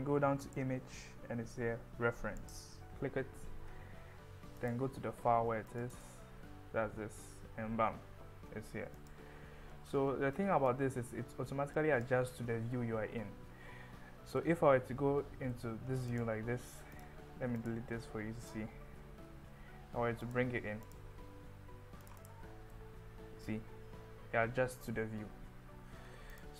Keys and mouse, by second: 9.0 click, 10.3-10.7 drag, 11.8 drag, 14.4-15.6 middle drag, 17.6 click, 18.9 Delete, 19.7 shift+a, 22.8-25.1 middle drag, 26.4 click.